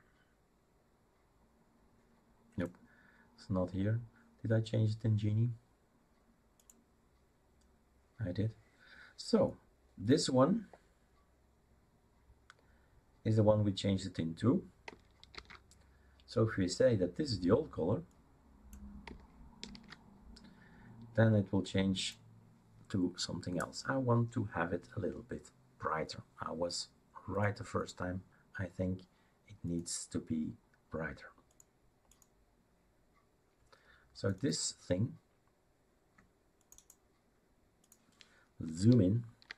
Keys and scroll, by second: 15.3 ctrl+c, 19.7 ctrl+v.